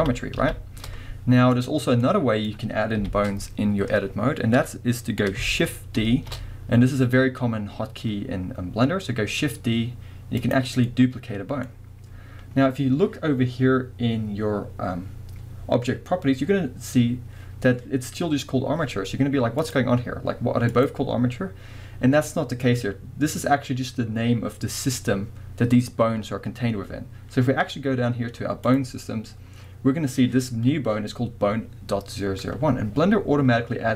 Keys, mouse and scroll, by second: 1.5 click, 2.0-10.5 middle drag, 3.0 KP_1, 6.0 shift+d, 10.5 click, 10.9-19.6 middle drag, 19.6 click, 20.7 click, 28.7 click.